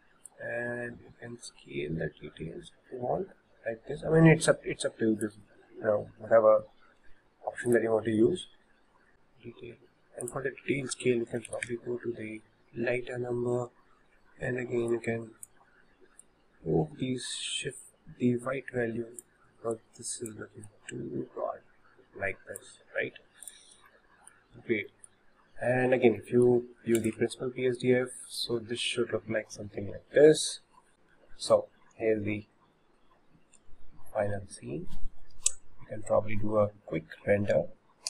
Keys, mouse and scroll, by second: 0.3-3.3 drag, 7.0 ctrl+z, 7.8 click, 10.2-13.4 drag, 14.9-19.3 drag, 19.7-23.5 drag, 23.9-27.0 shift+middle drag, 27.0 ctrl+shift+click, 34.0 scroll down 1, 34.4 scroll up 1.